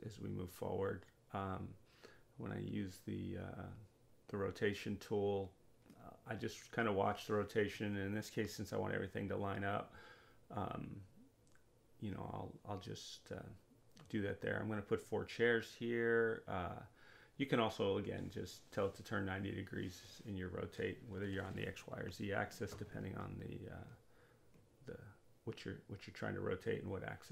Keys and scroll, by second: 0.8-2.2 typing.